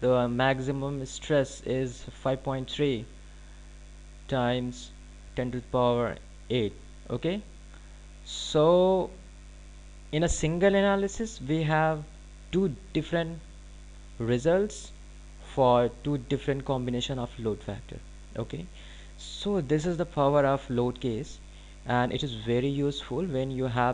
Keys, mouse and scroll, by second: 0.6 click.